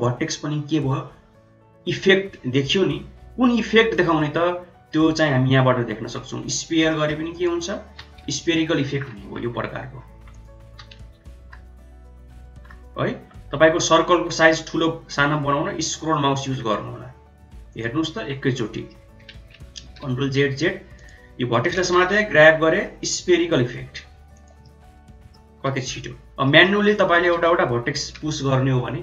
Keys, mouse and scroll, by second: 3.9-6.7 drag, 6.8 middle click, 7.2 click, 7.8 g, 10.2 click, 10.6 g, 14.4 middle click, 16.4 middle click, 16.7 middle click, 17.9 middle click, 19.2 ctrl+z, 19.5 ctrl+z, 19.8 ctrl+z, 20.1 ctrl+z, 20.4 ctrl+z, 20.9 click, 21.7 g, 24.5 middle click, 25.6 ctrl+z, 26.4 middle click, 26.7 click, 27.2 g.